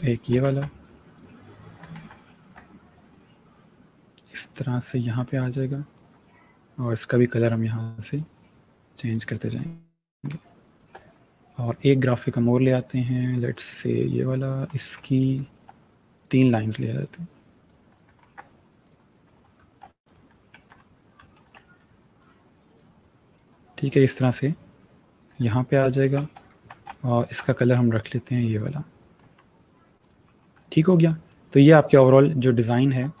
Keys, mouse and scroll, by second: 0.3 ctrl+c, 0.6 click, 1.2 click, 1.8 ctrl+v, 2.2 ctrl+g, 3.0 click, 6.7 click, 9.5 click, 10.1 click, 10.4 space, 11.0 click, 11.7 click, 12.5 click, 14.7 alt+scroll up 1, 15.3-15.7 scroll up 1, 15.9 click, 18.1 ctrl+c, 18.9 click, 19.9 alt+scroll, 20.0 ctrl+click, 20.2 ctrl+v, 21.4 ctrl+g, 22.4 shift+click, 25.8 space, 26.1 click, 26.2 space, 26.8-27.2 alt+scroll up 2, 27.2 space, 27.2 click, 29.5 v, 30.3 click, 30.9 space, 31.6 space, 33.0-33.2 alt+scroll down 2.